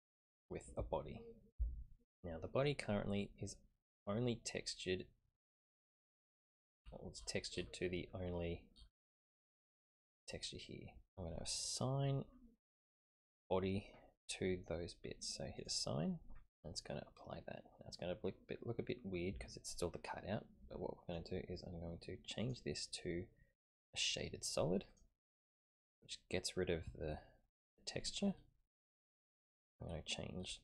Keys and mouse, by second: 6.1 click, 15.6 click, 16.9-21.2 middle drag, 22.4-25.0 drag.